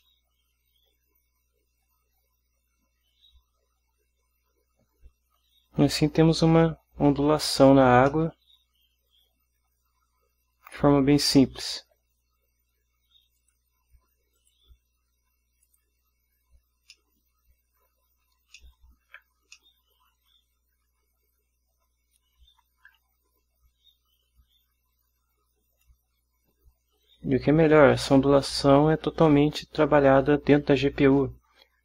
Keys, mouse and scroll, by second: 0.2-5.7 middle drag, 8.5-12.3 middle drag, 13.5 click, 14.5 click, 15.8 click, 17.1-18.1 middle drag, 18.7-19.4 ctrl+middle drag, 19.7-20.4 ctrl+middle drag.